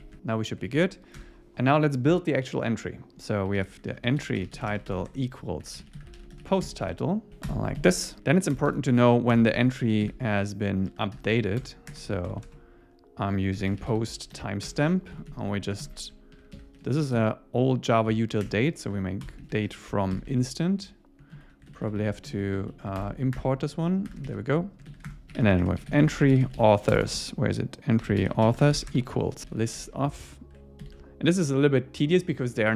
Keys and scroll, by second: 0.0 Down, 0.7 super+Right, 1.2 Return, 6.6 Escape, 6.9 Return, 7.3 Right, 7.8 Down, 11.6 Return, 14.7 Return, 15.2 alt+Left, 18.5 Return, 18.9 Right, 19.6 super+Right, 21.4 super+Left, 21.7 alt+Right, 22.2 alt+Right, 22.8 Right, 23.0 alt+Return, 24.1 Return, 24.3 super+s, 24.9 super+Right, 25.1 Return.